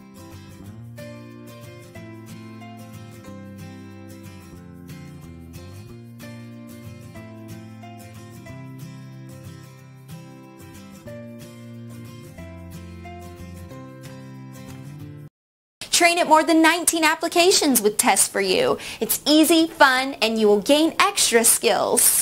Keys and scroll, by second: 2.0 Down, 14.6 Return.